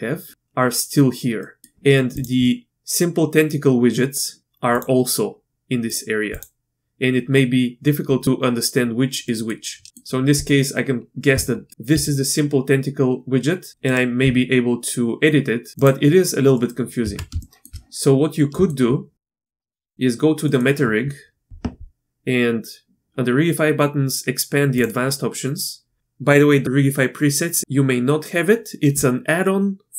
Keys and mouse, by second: 1.4 middle drag, 2.1 click, 2.4 middle click, 4.7 click, 6.3 click, 7.8 middle click, 9.3 middle click, 9.3 click, 9.9 click, 11.3 Tab, 11.7 s, 11.9 s, 14.2 s, 16.5 middle click, 17.0 Tab, 17.4 shift+middle click, 18.5-18.8 shift+middle drag, 19.6 shift+click, 19.9 click, 20.5 click, 24.8-25.1 drag.